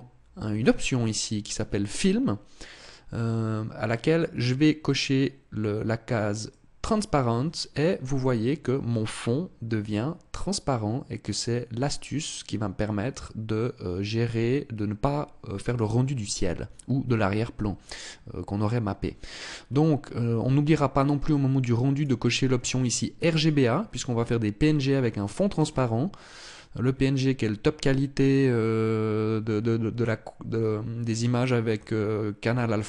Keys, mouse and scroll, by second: 6.0 click, 21.5 click, 22.9 click.